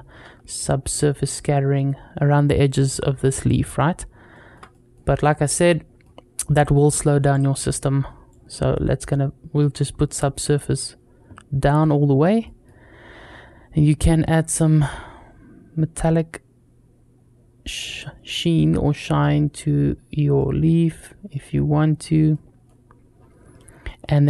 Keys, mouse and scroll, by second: 2.9 scroll down 1, 3.7 scroll down 1, 4.1 shift+middle drag, 4.5 middle drag, 5.4-5.8 middle drag, 6.3-7.3 drag, 8.1 click, 9.4 middle click, 11.3-12.2 scroll down 2, 12.2 middle click, 12.7-13.8 scroll up 4, 13.8-17.8 drag, 18.1 middle drag, 18.7 scroll up 2, 19.0-19.3 middle drag, 20.2-21.1 middle drag, 21.8-22.2 scroll down 2, 22.1-22.5 middle drag, 23.0-23.3 scroll down 2, 23.3 middle click, 23.9 middle click.